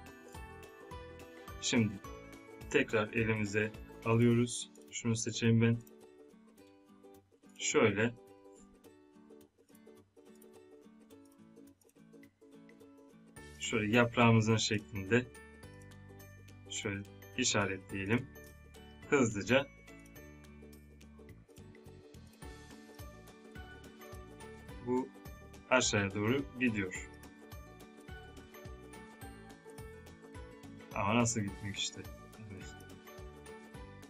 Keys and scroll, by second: 28.1 ctrl+Num_Lock.